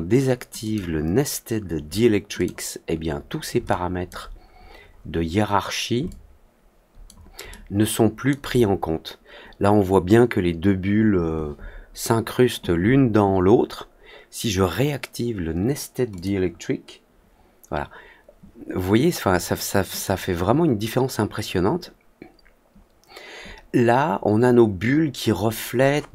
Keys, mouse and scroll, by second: 0.5 click, 2.3 click, 3.6 alt+click, 4.8 middle click, 5.2 middle click, 6.0-7.0 alt+drag, 7.4-8.2 alt+middle drag, 16.1 click, 19.9 click.